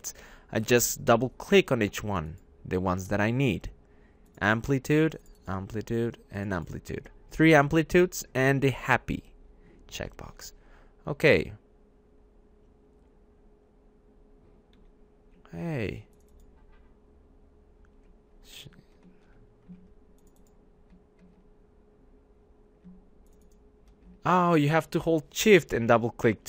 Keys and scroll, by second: 10.3 `, 11.1 `, 14.7 `.